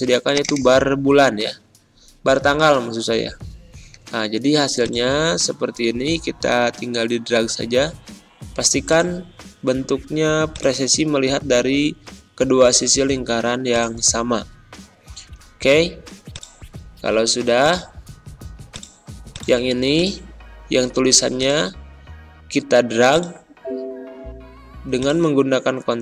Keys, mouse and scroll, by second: 0.3 click, 4.7-26.0 drag.